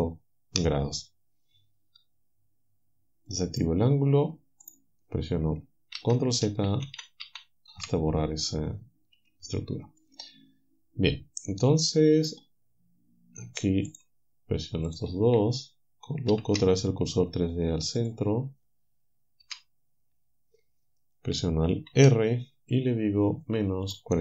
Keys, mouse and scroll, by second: 3.3 click, 4.7 click, 6.0 ctrl+z, 6.5 ctrl+z, 6.9 ctrl+z, 9.2 a, 10.0-12.5 right drag, 13.9 shift+right click, 14.9 shift+right click, 16.3 shift+s, 18.0 click, 19.5 KP_7, 21.9 alt+r, 23.9 click.